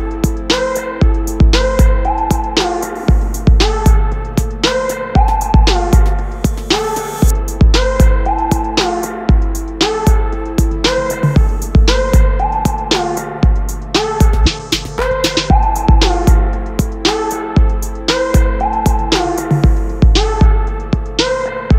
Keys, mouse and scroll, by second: 0.3 click, 0.5-4.0 middle drag, 0.9 g, 12.9 click, 13.1 Tab, 13.4 click, 14.6 e, 17.4 KP_Enter, 18.4 ctrl+z, 18.8 shift+click, 19.5 e, 19.9 KP_Enter, 20.1 Tab, 20.3 middle click, 21.1 KP_0.